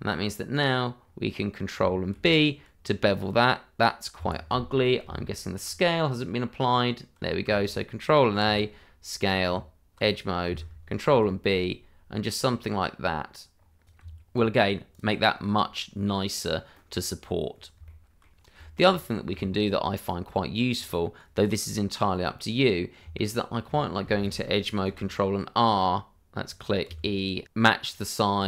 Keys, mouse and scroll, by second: 1.0-1.7 scroll up 1, 2.1 ctrl+b, 5.0 Tab, 8.4 ctrl+a, 9.2 click, 9.4 Tab, 11.0 ctrl+b, 12.4-13.3 scroll up 1, 13.8 click, 14.0 Tab, 14.6 scroll down 1, 14.9 click, 15.1 scroll down 1, 15.3 middle click, 16.7-17.5 scroll down 1, 17.5 scroll down 1, 17.8 shift+middle click, 18.8-19.3 scroll up 1, 19.3 shift+middle click, 19.6-20.5 scroll up 1, 20.7 click, 21.9-22.8 scroll up 1, 23.0 Tab, 24.8 ctrl+r, 26.5 click, 26.8 e.